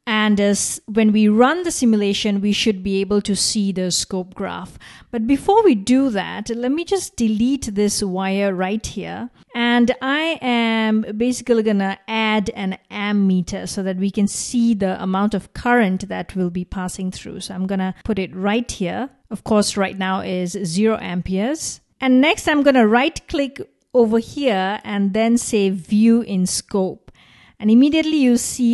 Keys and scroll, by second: 8.6 BackSpace.